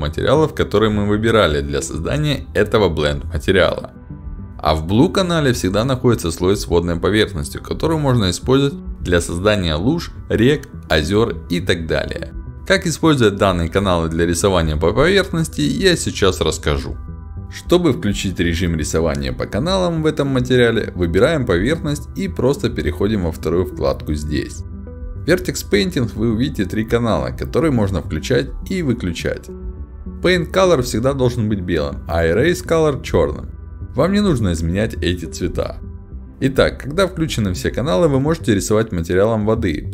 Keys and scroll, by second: 7.6 w, 8.9-10.6 typing, 12.8-14.8 typing, 21.9 ctrl+alt+d, 25.1 e, 25.5 w, 25.6 d, 25.9 e, 30.1 d, 34.0 w, 34.6 e, 34.9 a, 35.9 s, 36.1 d, 36.4 w, 37.6 a.